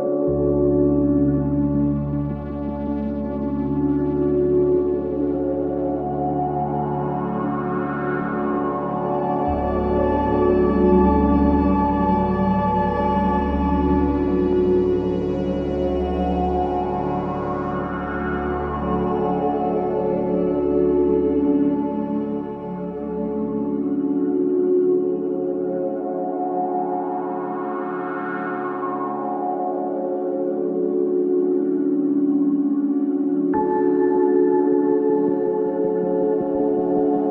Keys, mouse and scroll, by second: 1.9-5.0 drag, 7.5 click, 7.8 scroll up 1, 11.1 scroll up 1, 12.0-22.5 drag, 22.8-23.4 scroll down 1, 24.0-24.3 scroll up 1, 24.6-26.0 scroll down 1, 29.0 click, 35.4 click.